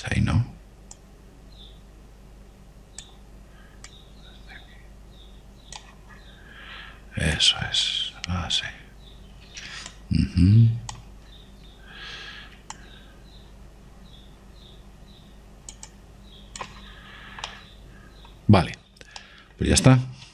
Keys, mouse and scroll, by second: 1.3 ctrl+z, 2.2 click, 5.2 click, 8.7 click, 11.2 click, 14.1 click, 17.2-19.0 drag, 18.2-20.3 middle drag.